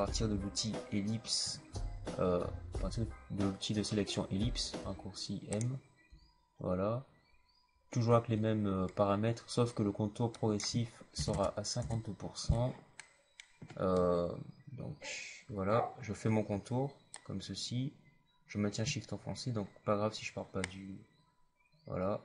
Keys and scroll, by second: 1.3 m, 4.7 m, 6.0 m, 11.1 KP_5, 11.2 KP_0.